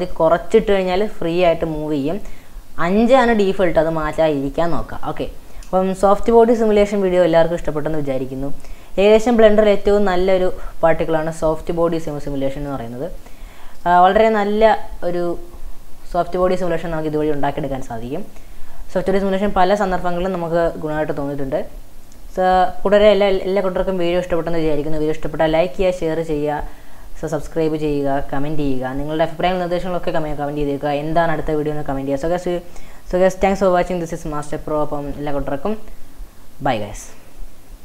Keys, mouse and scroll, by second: 0.2-2.5 middle drag, 2.5 scroll down 1, 5.3 scroll up 2, 5.7 scroll down 3, 6.1-6.7 shift+middle drag, 6.7 space, 7.0 scroll down 2, 9.5 middle click, 10.0-10.3 scroll up 2, 11.7 drag, 12.5 scroll down 3, 12.7-16.8 middle drag, 16.8 scroll up 2.